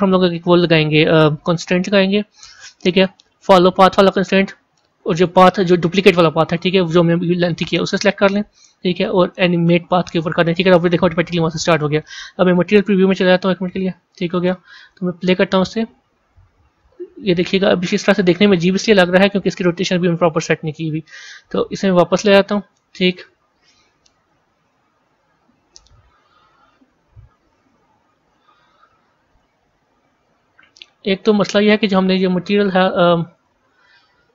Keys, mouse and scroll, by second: 3.5-5.1 drag, 9.7-12.7 drag, 12.7 z, 13.6-15.8 middle drag, 15.8 click, 20.0-24.1 drag, 25.1-29.4 drag, 30.2 z, 31.7 click.